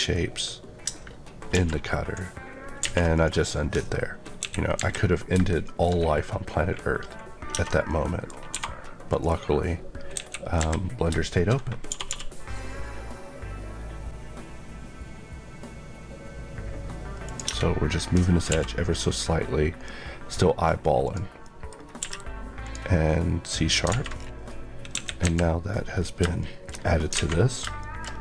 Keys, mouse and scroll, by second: 2.7 a, 3.1 click, 4.3 KP_1, 5.6 middle click, 5.8-6.4 scroll up 1, 7.4 Tab, 7.8 middle click, 8.4 2, 9.0 click, 11.8 typing, 17.2 click, 17.4 Tab, 18.4 1, 18.8 scroll down 1, 21.0 click, 21.3 middle click, 21.6 scroll up 1, 21.9 q, 22.6 click, 23.8 alt+a, 24.1 scroll down 1, 24.8 KP_1, 25.8 scroll down 1, 26.3 middle click, 26.4 scroll down 1, 27.0 scroll up 1, 27.1 alt+a, 27.7 middle click, 28.0 scroll up 1.